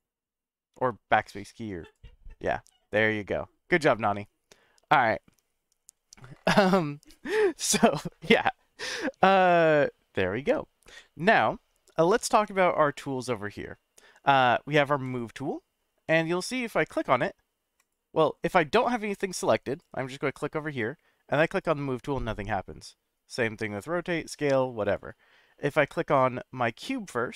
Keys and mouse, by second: 10.8 middle click, 17.8 click, 18.8 click, 19.4 click, 19.8 click, 20.3 click, 20.7 drag, 24.8 click, 26.7 click.